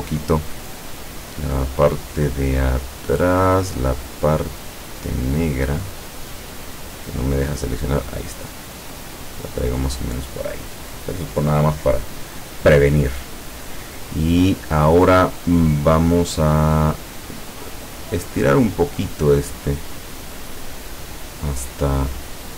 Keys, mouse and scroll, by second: 1.0 click, 1.7 click, 4.2 click, 4.8 click, 5.9 click, 6.4 click, 8.1-9.8 drag, 18.0 click.